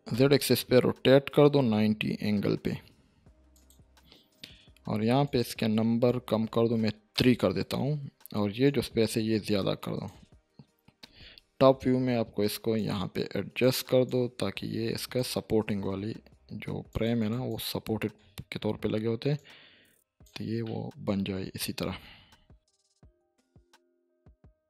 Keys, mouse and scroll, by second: 0.0-0.6 typing, 3.5 ctrl+click, 5.2 click, 6.7 3, 7.1 Return, 8.6-10.2 drag, 11.5 7, 12.7-13.7 drag, 20.6-21.9 middle drag, 22.0 scroll up 1, 22.8-24.3 drag, 24.5 Tab.